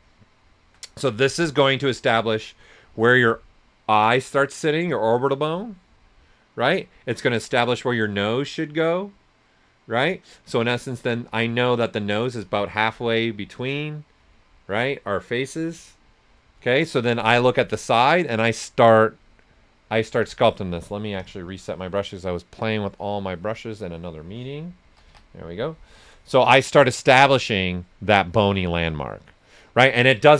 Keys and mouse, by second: 1.0 right click, 18.8 click, 24.6-25.5 typing, 26.7 s, 26.7 click, 27.8 typing.